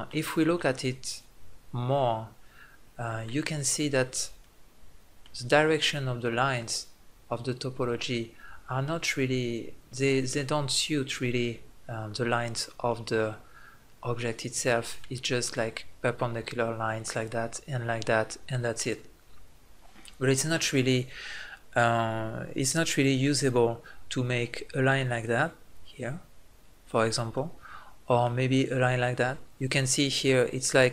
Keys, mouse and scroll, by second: 0.6-2.2 middle drag, 2.6 middle click, 9.0 middle click, 13.1-14.8 middle drag, 18.8 middle click, 22.6-25.7 middle drag, 27.3-30.9 middle drag.